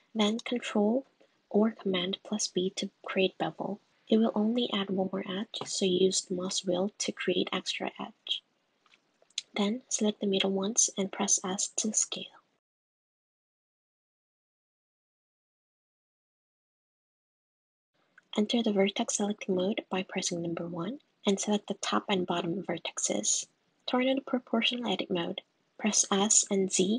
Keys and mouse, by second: 0.6 super+b, 7.6 middle click, 8.4 shift+click, 9.2 shift+click, 9.3 middle click, 10.2 shift+click, 10.5 shift+click, 10.9 shift+click, 11.4 shift+click, 11.5 shift+click, 12.3 shift+click, 12.4 shift+click, 13.5 super+z, 14.3 click, 14.8 shift+click, 15.3 shift+click, 15.4 middle click, 16.0 super+z, 16.3 shift+click, 17.0 Tab, 17.9 s, 20.1 1, 20.4 click, 21.1 super+z, 23.1 shift+click, 24.7 middle click, 25.9 s.